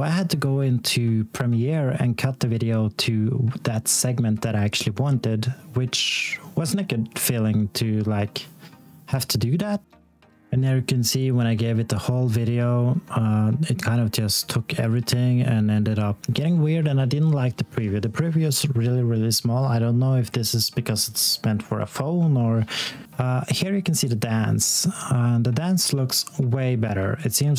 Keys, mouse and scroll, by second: 0.3 click, 2.6 d, 5.9 Right, 7.4 c, 8.5 click, 9.9 click, 10.1 scroll down 1, 11.0 click, 20.5-21.8 scroll down 1, 21.8 click, 23.1 click.